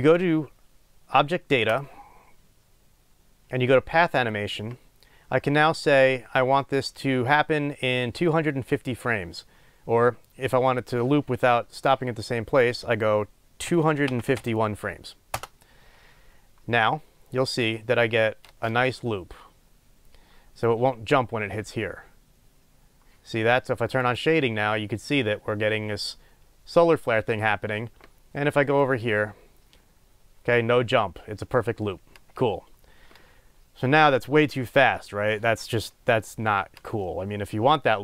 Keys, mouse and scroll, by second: 15.3-24.3 drag, 15.6 Return, 18.4 space, 29.1 right click.